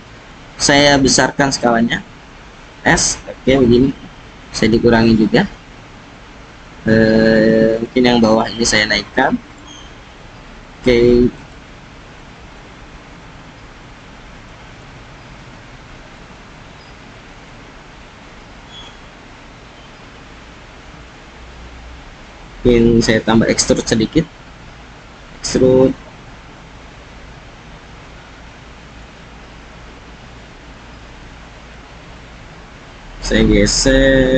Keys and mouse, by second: 2.2 s, 7.7 click, 8.7 click, 9.8 s, 11.3 click, 12.0 click, 13.8 click, 14.6 click, 15.5 click, 16.4-18.5 drag, 18.5 KP_1, 20.5 click, 23.7 e, 25.4 z, 30.6 click, 31.2 click, 33.0 g.